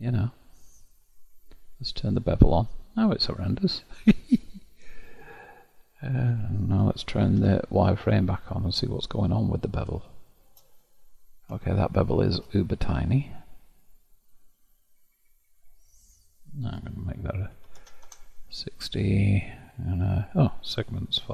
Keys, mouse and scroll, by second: 1.8-4.7 drag, 7.5 alt+v, 9.4-10.2 scroll up 2, 10.2-10.9 shift+middle drag, 10.9-11.7 scroll up 1, 11.7-14.8 shift+middle drag, 16.7-19.7 drag, 20.4-21.3 drag.